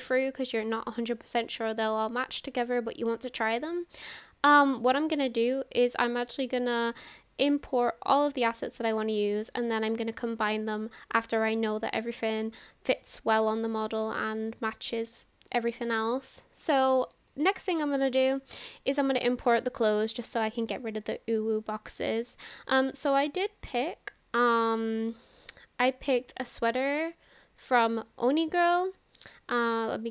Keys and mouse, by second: 14.1-14.5 shift+middle drag, 14.7-15.6 middle drag, 15.8-16.4 middle drag, 16.7 shift+middle click, 17.3 shift+middle click, 17.8 middle click, 22.0 click.